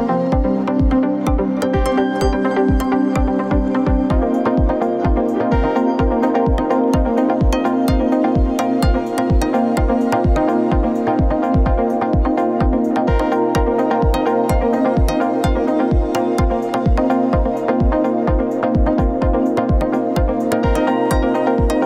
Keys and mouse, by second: 0.7 click, 2.1 alt+shift+click, 3.9 click, 4.9 click, 5.9 alt+shift+click, 7.7 alt+shift+click, 9.0 click, 10.1 click, 10.7 alt+shift+click, 13.3 ctrl+KP_Add, 13.9 ctrl+KP_Add, 15.6-21.8 middle drag.